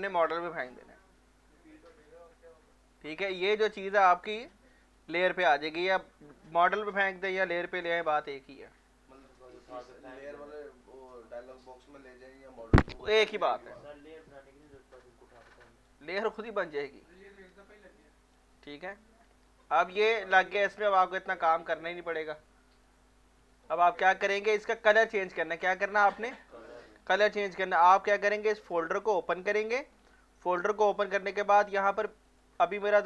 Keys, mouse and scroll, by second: 5.1 click, 6.4 click, 12.2 click, 12.4 click, 14.7 alt+click, 15.6 alt+right click, 16.1 alt+click, 17.0 alt+click, 18.0 alt+right click, 19.0 f, 19.5 alt+click, 20.6 alt+right click, 22.2-23.5 drag, 23.5-25.2 alt+drag, 25.6 alt+middle click, 28.6 alt+middle click, 29.9-31.8 scroll down 1, 32.3 click.